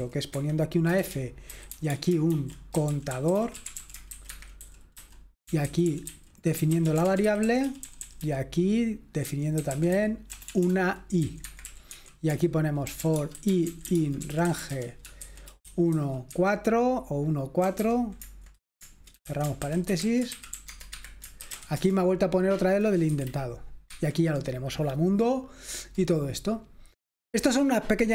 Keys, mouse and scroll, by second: 0.4 Escape, 1.0-8.5 typing, 9.5-16.3 typing, 17.6 typing, 19.3-22.0 typing, 20.7 Tab, 20.9 Escape, 23.3 F5, 23.8 Escape.